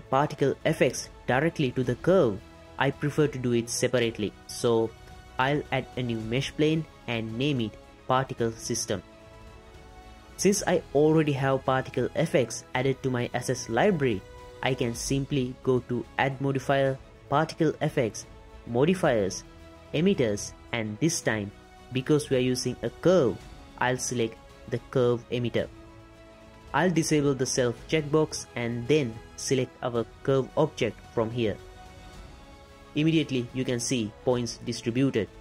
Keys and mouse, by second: 0.3 middle click, 4.9 shift+a, 7.3 F2, 16.5-25.5 drag, 29.7 click, 31.1 click, 33.5-34.0 shift+drag, 34.3-34.7 drag, 34.9 shift+click.